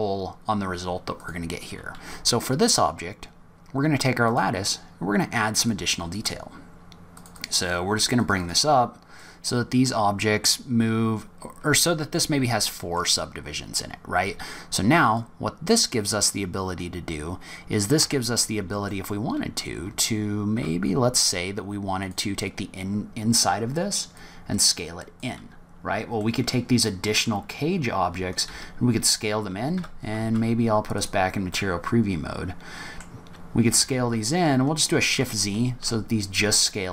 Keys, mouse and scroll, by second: 1.1 click, 4.2 click, 5.5 click, 6.1 click, 7.1 click, 7.3 click, 8.3 click, 9.1 middle click, 12.1 middle click, 15.0 click, 18.0 Tab, 18.7 middle click, 19.8 z, 21.8 click, 23.9 click, 26.0 middle click, 27.5-28.0 scroll down 3, 27.8-28.4 scroll up 2, 28.4 s, 29.9 z, 31.5 middle click, 33.1 scroll up 1, 33.7 s.